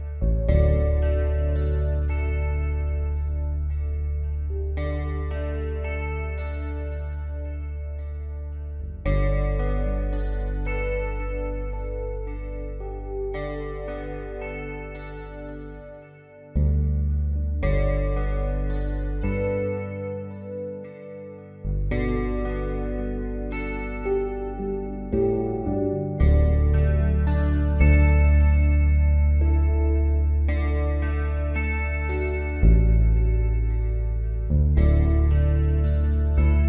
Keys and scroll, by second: 2.7 space, 3.4 space, 6.7 space, 11.1 space, 14.5 space, 17.9 space.